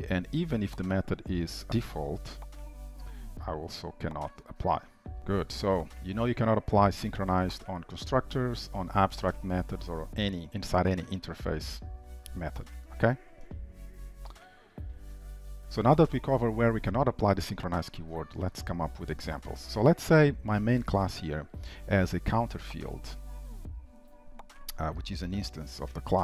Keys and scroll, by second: 1.0 ctrl+shift+Left, 2.2 Delete, 4.7 Return, 5.2 ctrl+s, 5.6 ctrl+/, 6.0 ctrl+s, 14.0 ctrl+y, 14.3 ctrl+s.